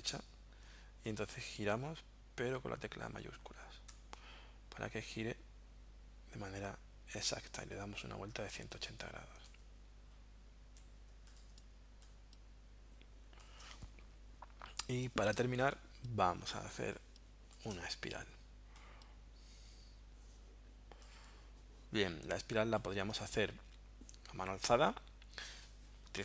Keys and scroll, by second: 11.6 space, 15.4 space.